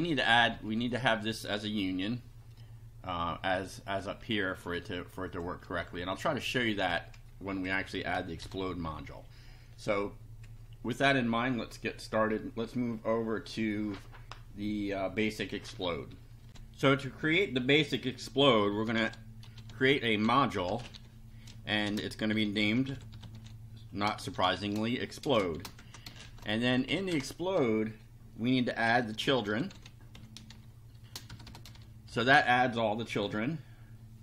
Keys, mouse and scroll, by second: 0.2 Up, 3.3 click, 4.7 ctrl+c, 5.3 ctrl+click, 5.6 ctrl+v, 6.1 ctrl+click, 7.5 Down, 8.4 shift+], 16.5 ctrl+r, 18.6-26.2 typing, 25.8 shift+Return, 26.6 shift+Up, 26.9 shift+End, 27.1 shift+Return, 28.5-32.1 typing.